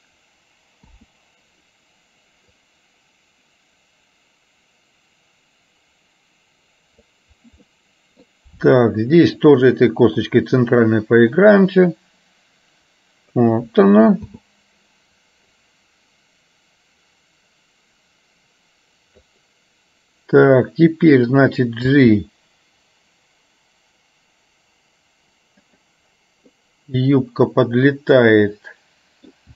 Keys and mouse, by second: 2.8-7.3 drag, 7.8 middle click, 9.6-11.0 drag, 12.0-13.5 drag, 15.8-19.5 drag, 21.9 g, 26.6-29.4 middle drag.